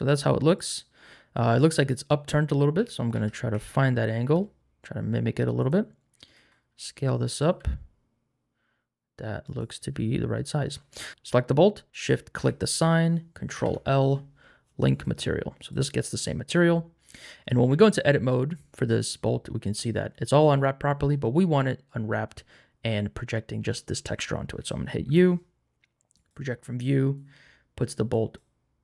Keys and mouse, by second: 2.7 r, 3.1 x, 3.5 z, 4.2 y, 6.3 s, 7.2 click, 7.4 g, 9.4 click, 12.0 shift+click, 13.5 ctrl+l, 15.6 click, 17.7 Tab, 25.0 u.